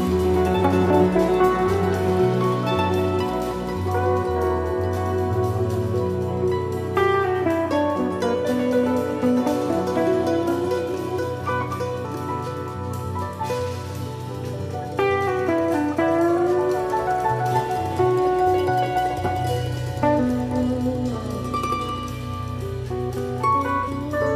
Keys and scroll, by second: 0.1 Right.